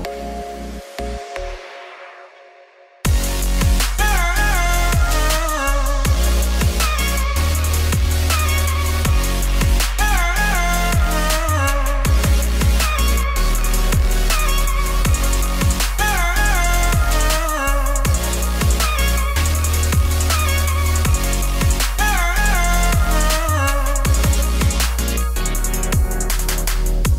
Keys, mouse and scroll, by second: 0.7-3.0 typing, 1.3 scroll down 1, 2.8 scroll up 3, 3.5 scroll down 1, 3.6-4.6 shift+middle drag, 4.6 g, 6.4 ctrl+r, 8.3 scroll up 2, 8.5 shift+middle click, 8.7 ctrl+r, 14.5-18.8 drag, 18.9 middle click, 19.4 alt+click, 20.0 alt+click, 20.2 z, 20.8 alt+click, 21.1-25.0 alt+shift+drag, 25.3 alt+shift+click, 26.0 alt+click, 26.3-27.1 alt+shift+drag.